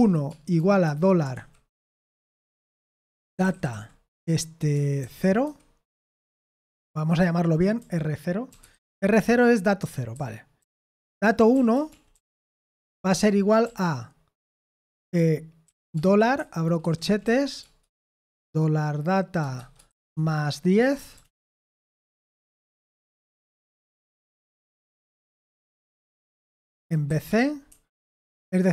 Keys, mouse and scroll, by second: 0.0-3.7 typing, 4.7-13.6 typing, 5.9 Escape, 14.9-17.5 typing, 19.5-24.1 typing, 24.7 Delete, 25.7-27.7 typing, 28.2 shift+Escape.